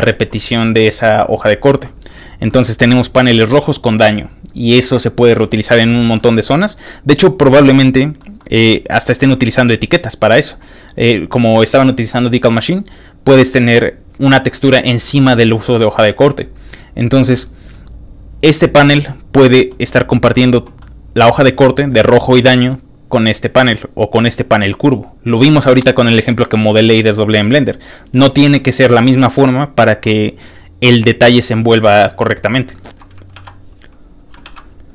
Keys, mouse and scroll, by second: 1.8-2.2 scroll down 2, 2.5 ctrl+middle click, 6.1 middle click, 6.6 middle click, 7.3 scroll down 2, 7.4 middle click, 8.4-9.5 middle drag, 8.6 scroll up 1, 10.2 middle click, 12.3 middle click, 12.3 scroll up 1, 14.4-15.0 scroll up 1, 16.5 scroll down 2, 16.8 scroll up 2, 17.5 scroll down 2, 19.5 middle click, 20.2 middle click, 20.8 middle click, 29.0 scroll up 2, 29.3 middle click, 30.6 middle click, 30.7-31.2 scroll up 2, 33.4 ctrl+w, 34.0 middle click, 34.0 scroll down 1, 34.5 ctrl+w.